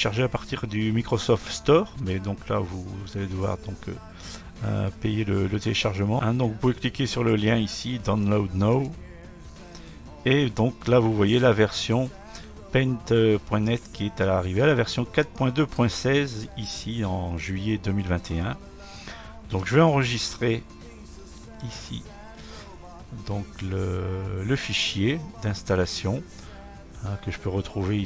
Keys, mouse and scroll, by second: 8.9-11.9 drag, 16.8 click, 19.7 click, 21.7 click.